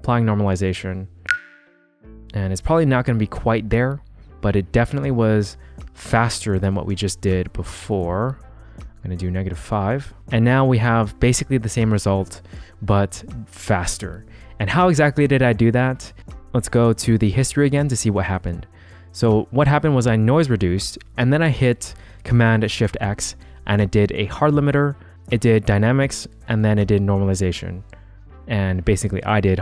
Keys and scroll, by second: 1.3 shift+w, 6.2 g, 7.6-8.6 typing, 16.2 shift+g.